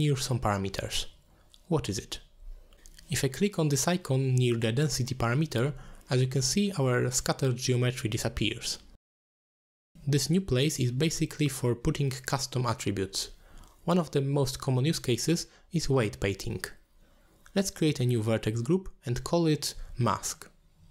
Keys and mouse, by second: 4.7 click, 7.0-8.4 middle drag, 9.5-10.6 drag, 15.7 click, 16.9 drag, 17.6 click, 17.7-19.4 drag.